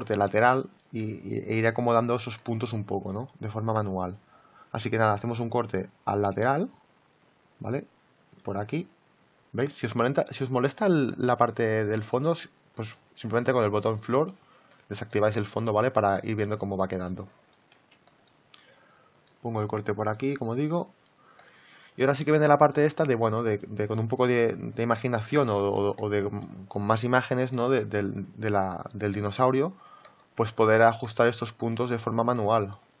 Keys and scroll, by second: 17.7 ctrl+z.